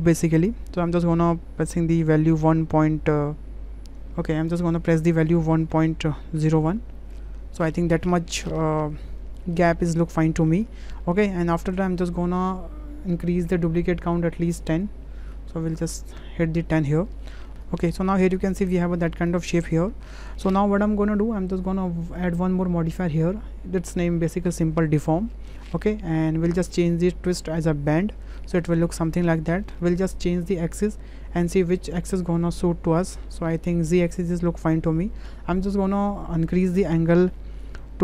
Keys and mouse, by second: 9.4 shift+middle click, 9.7-10.5 drag, 11.5 shift+click, 12.0 click, 13.7 click, 14.7-16.8 drag, 17.9 shift+middle click, 18.2-18.8 middle drag, 19.0 shift+middle click, 19.6-20.1 middle drag, 22.2-24.6 middle drag, 25.6 shift+middle click, 27.9 click, 28.6-29.7 middle drag, 31.8 click, 32.9 click, 33.9-35.0 middle drag, 36.6-38.0 drag.